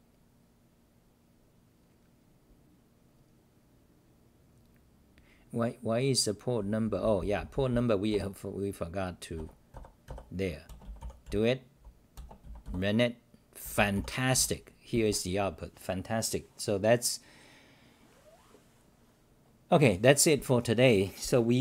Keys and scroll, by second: 6.4-12.6 typing, 9.7-10.0 scroll up 9, 14.3 w, 15.9-16.7 scroll.